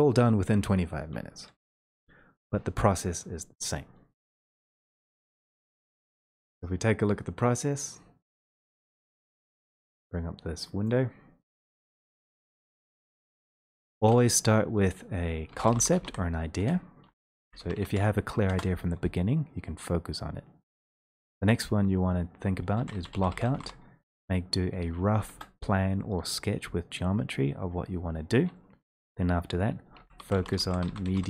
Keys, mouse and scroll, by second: 7.8 click, 10.9 click, 11.7 click, 12.2 ctrl+scroll, 13.0 ctrl+scroll, 17.9 ctrl+middle click, 18.0-19.0 typing, 22.5-23.6 typing, 25.2 Return, 30.0-31.2 typing.